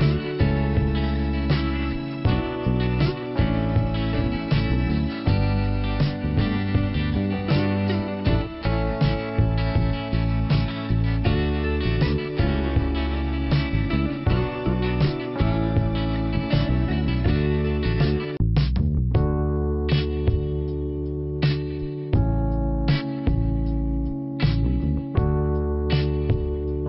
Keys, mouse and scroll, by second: 1.9 click, 5.0 click, 5.1 click, 5.7 click, 7.0 click, 8.6 click, 14.4 click, 15.0-15.4 scroll down 2, 15.7 click, 16.1 scroll down 1, 19.7 click, 20.5 click, 20.9 scroll down 2, 23.4 click, 23.8 scroll up 2.